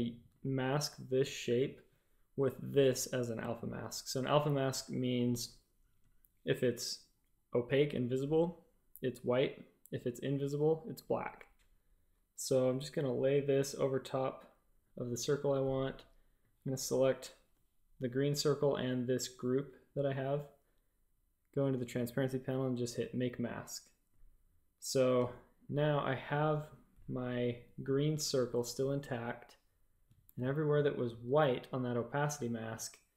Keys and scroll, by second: 5.1 Tab, 28.2 shift+super+a, 30.2 shift+super+a.